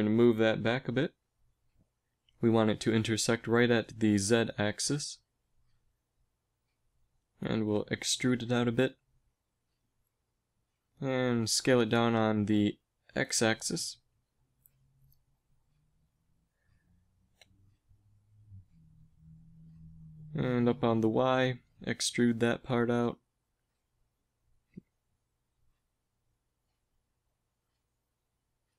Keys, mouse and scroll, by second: 3.2 g, 7.1 e, 10.0 z, 11.8 s, 13.2 s, 17.6 KP_1, 18.0 z, 19.3 s, 21.2 e, 24.3 s, 25.8 e, 27.1 s.